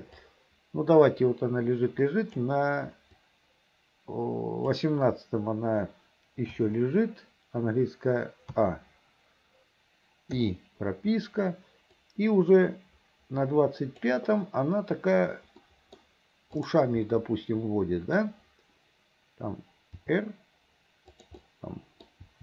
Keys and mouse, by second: 0.4-2.6 drag, 3.3-4.9 drag, 8.6 i, 8.6 a, 10.5 i, 12.1-14.2 drag, 15.8 click, 17.2 click, 17.7 middle click, 20.1 r, 21.6 click, 22.3 r.